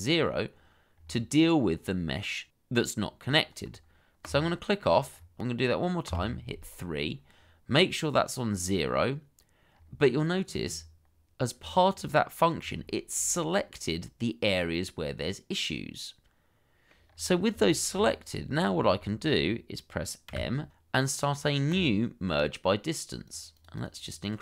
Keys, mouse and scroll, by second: 0.9-2.6 scroll up 1, 2.6-3.4 scroll down 1, 5.2 scroll up 1, 6.1 3, 9.8-10.6 scroll up 1, 10.6 scroll down 1, 12.9 shift+middle click, 13.5 middle click, 17.0 scroll up 1, 17.6 shift+middle click, 17.9-18.7 shift+scroll up 2, 19.0 shift+middle click, 20.3 m, 23.5 double click.